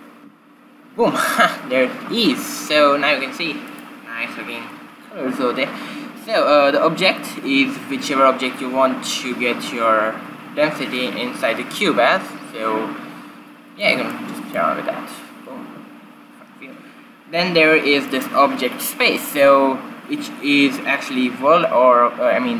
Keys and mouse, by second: 3.6-5.4 drag, 11.7 middle click, 13.5 middle click, 14.1-15.7 middle drag, 15.1 q, 18.0-20.0 drag.